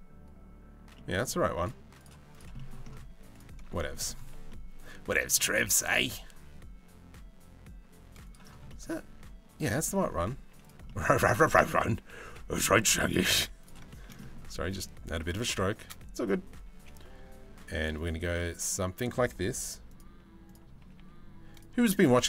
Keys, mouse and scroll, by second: 0.5 middle click, 1.9 middle click, 2.1 middle click, 2.7 z, 3.4 middle click, 4.1 middle click, 5.4 g, 8.3 middle click, 9.3 shift+middle click, 9.9 z, 10.4 middle click, 10.9 g, 12.9 z, 13.5 shift+middle click, 16.2 g, 19.5 right click, 20.4 g, 21.8 z.